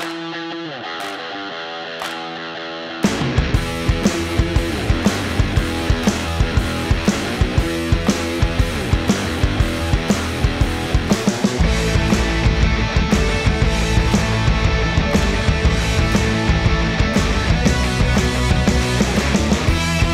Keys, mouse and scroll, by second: 3.8 click, 5.4 right click, 7.0 click, 9.1 ctrl+space, 11.4 click, 12.6 ctrl+space, 13.7 ctrl+space, 15.1 click, 15.9-17.7 typing, 18.0 Return, 19.7 typing.